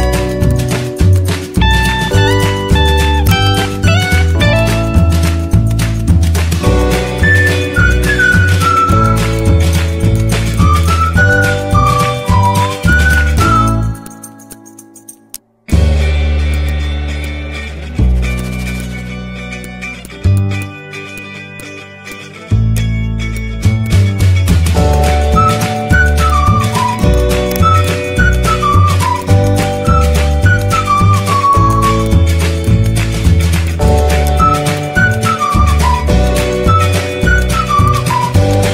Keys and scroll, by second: 0.1 ctrl+z, 5.2 Up, 9.2 z, 11.8 ctrl+c, 11.9 ctrl+v, 15.5 z, 20.5 z, 28.4 z, 32.5 z, 35.6 z.